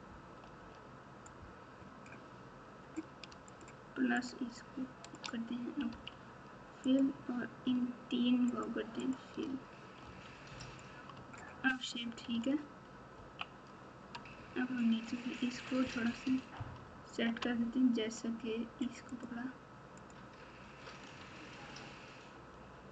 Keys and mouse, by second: 0.3 KP_4, 0.5 KP_4, 3.5 shift+click, 4.1 shift+click, 5.9 f, 6.8 click, 8.5 shift+click, 9.0 shift+click, 10.0 f, 10.6 click, 11.1 Tab, 12.3 alt+z, 13.1 KP_1, 14.2 Tab, 16.5 ctrl+KP_6, 17.0 ctrl+KP_6, 20.0 click, 21.2 alt+z.